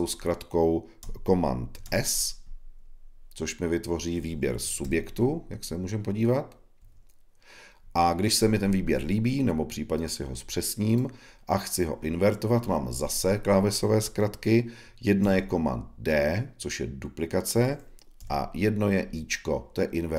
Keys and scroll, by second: 1.7 super+s, 15.1 super+d.